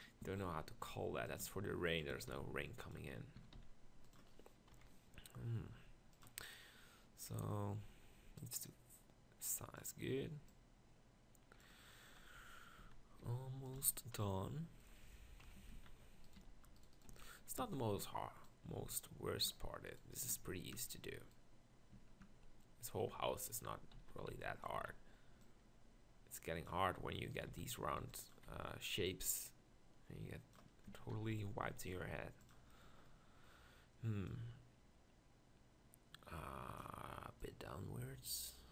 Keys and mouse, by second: 0.2 s, 1.5 g, 2.1 s, 3.4 s, 4.8 KP_7, 5.8 g, 6.6 middle drag, 6.9 middle click, 12.3 KP_7, 12.8 z, 13.2 g, 13.8 z, 15.4 KP_1, 15.6 Tab, 15.7 z, 16.4 b, 17.1 z, 17.6 Tab, 20.9 Tab, 21.5 Tab, 22.6 Tab, 22.7 Tab, 23.1 Tab, 24.0 z, 24.3 b, 24.8 z, 27.5 z, 28.1 b, 28.5 z, 30.9 Tab, 31.1 s, 32.7-33.1 middle drag.